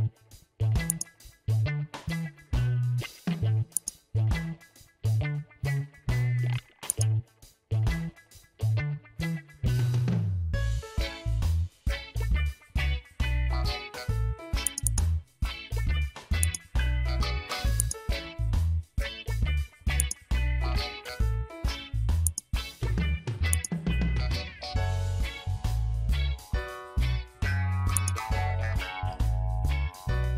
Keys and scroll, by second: 2.7 ctrl+t, 11.1 Return.